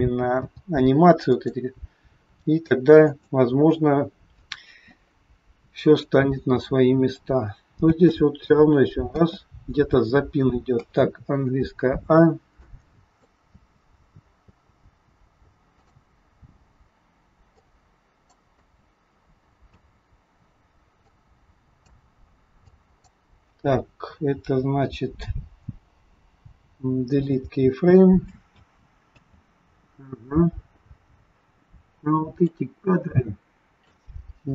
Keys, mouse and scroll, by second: 0.3 i, 3.2 click, 6.0 click, 7.9 click, 7.9 space, 9.2 space, 11.4 a, 12.6 click, 13.5 space, 14.5 space, 15.9 click, 17.7 click, 18.5 space, 19.8 space, 21.1 click, 22.7 click, 26.7 Delete, 28.4 space, 29.2 space, 29.7-32.1 scroll down 20, 32.4 click.